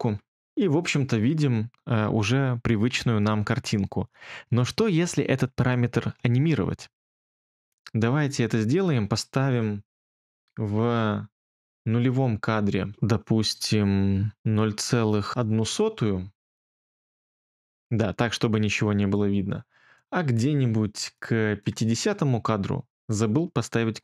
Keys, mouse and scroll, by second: 14.3-15.8 typing.